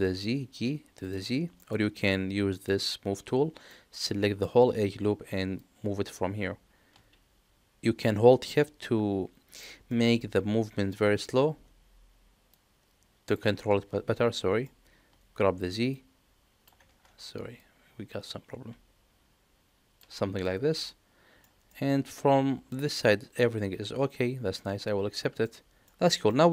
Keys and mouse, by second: 1.5 middle click, 2.5 click, 3.6 middle click, 5.6-9.6 drag, 9.9-10.9 middle drag, 12.5 shift+click, 13.7 ctrl+z, 14.3 middle click, 16.0 shift+click, 16.8 ctrl+z, 17.6-19.9 drag, 20.8 middle click, 21.7 shift+middle click, 22.7-24.5 middle drag, 25.4 middle click, 26.2 middle click.